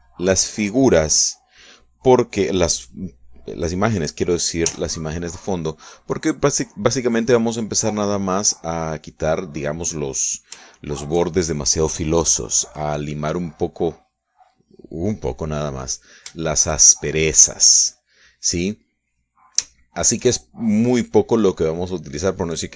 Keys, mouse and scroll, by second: 5.7 z, 6.5-10.7 drag, 11.7-13.0 shift+drag, 13.8-19.8 drag, 19.8 middle click, 20.8-22.7 shift+drag.